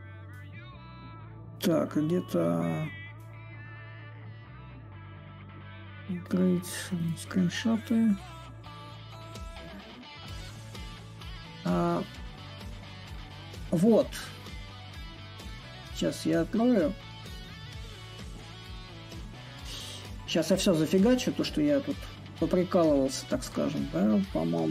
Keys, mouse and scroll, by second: 2.8-6.6 right drag, 6.6-7.9 drag, 12.7-17.8 drag, 19.7-24.7 middle drag.